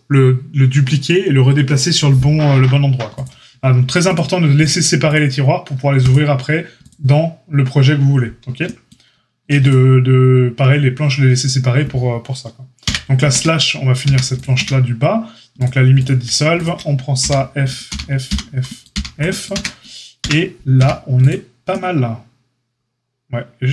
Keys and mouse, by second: 3.1 click, 3.2-4.5 middle drag, 4.5 click, 4.6-5.0 middle drag, 5.0 click, 5.1-6.7 middle drag, 6.7 click, 6.8-9.5 middle drag, 9.5 click, 9.6-15.9 middle drag, 12.8 KP_Divide, 13.3 Tab, 14.0 a, 14.5 q, 15.9 click, 16.0-16.5 shift+middle drag, 16.5 shift+click, 16.6-17.6 shift+middle drag, 17.1 f, 17.6 click, 17.7-23.7 middle drag, 17.8 f, 18.2 f, 18.8 f, 19.5 Tab, 20.1 KP_Divide, 20.7 a.